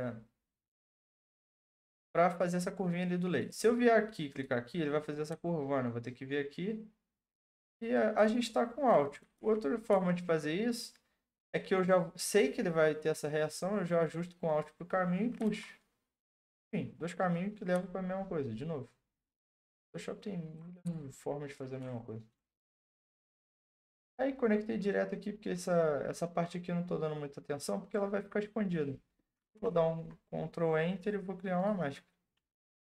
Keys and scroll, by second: 9.4 ctrl+z, 9.9 ctrl+z, 29.6 ctrl+Return.